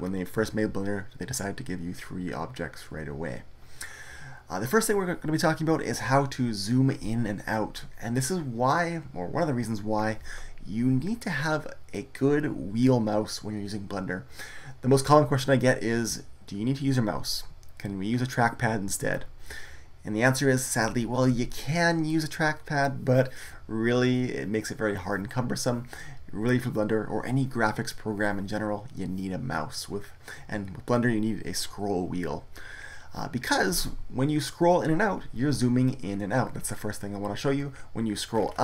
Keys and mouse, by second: 38.3-38.6 middle drag.